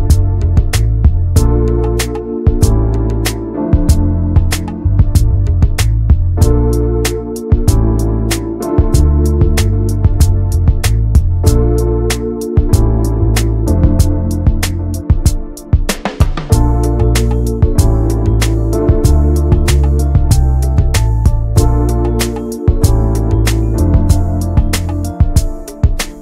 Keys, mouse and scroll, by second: 3.3 middle click, 3.8 e, 4.9 middle click, 5.5 e, 6.6 middle click, 6.9 m, 7.7 middle click, 8.0 Tab, 8.1 click, 8.3 scroll down 4, 8.4 middle click, 8.9 ctrl+s, 9.2 middle click, 9.9 ctrl+s, 10.0 click, 10.3 alt+middle click, 10.9 alt+z, 11.1 scroll up 2, 11.5 ctrl+s, 11.7 Tab, 12.2 click, 12.6 l, 12.9-13.7 scroll up 3, 13.7-16.1 drag, 17.3 click, 18.8-19.5 scroll up 2, 19.5 click, 21.1 click, 22.1 scroll down 3, 22.4 ctrl+s, 22.8 shift+middle click, 23.1 shift+d, 23.9 click, 24.8 shift+middle click, 24.9-25.6 scroll up 2, 25.2 shift+middle click, 25.9 scroll up 5.